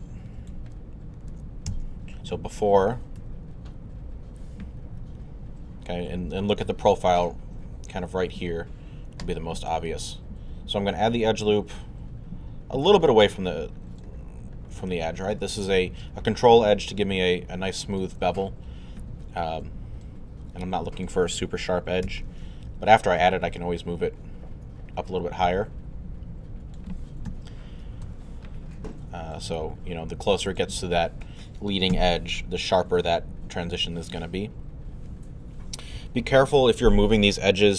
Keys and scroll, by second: 1.7 alt+z, 2.5 z, 3.8 3, 22.1 alt+w, 27.3 2, 28.0 1, 31.9 3.